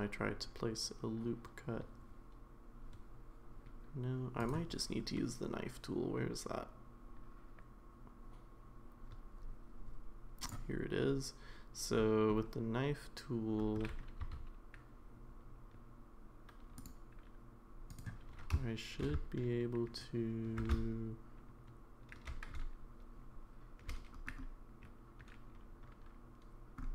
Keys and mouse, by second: 16.8-18.0 drag, 16.8 1.